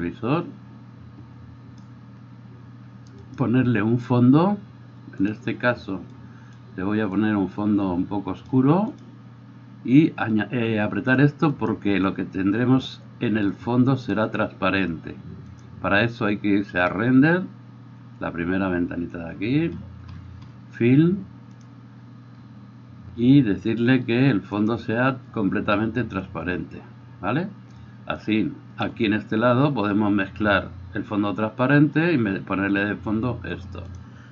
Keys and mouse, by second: 3.4-8.9 middle drag, 8.9 click, 9.1-11.5 middle drag, 11.5 click, 11.7-13.5 middle drag, 13.5-15.7 drag, 15.7-21.6 middle drag, 21.6-24.8 drag, 24.8-28.2 middle drag, 28.2-34.0 drag, 34.0 middle click.